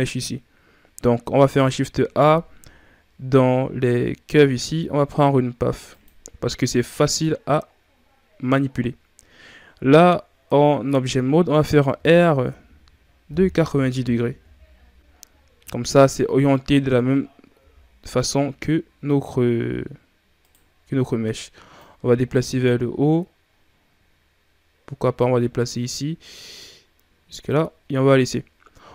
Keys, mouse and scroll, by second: 1.4 shift+a, 7.6 scroll up 2, 11.8 r, 17.4 g, 21.6-24.6 drag.